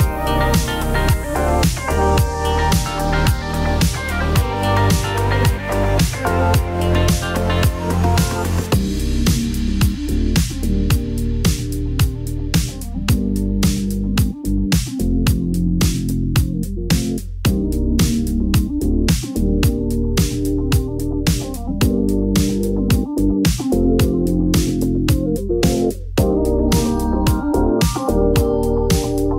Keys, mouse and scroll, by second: 0.7 Tab, 0.9 middle click, 2.3-4.9 drag, 5.4 Tab, 5.7 shift+middle click, 6.7 click, 7.3 g, 7.4 y, 8.6 click, 9.4-10.5 drag, 10.9 click, 11.5 middle click, 12.6 g, 12.7 y, 13.6 click, 14.1 Tab, 14.7-16.0 drag, 16.6 Tab, 18.4 g, 18.6 y, 20.3 click, 20.3-21.3 typing, 21.4 click, 22.1-24.1 drag, 24.4 middle click, 24.6 click, 25.3 middle click, 26.7 middle click.